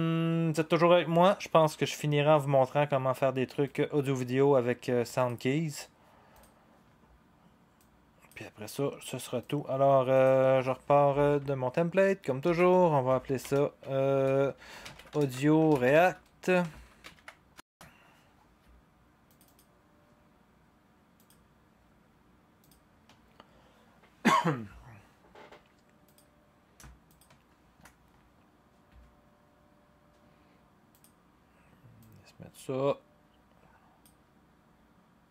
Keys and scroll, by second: 12.4 ctrl+d, 13.4 Return, 14.3-17.6 typing, 18.0 Return.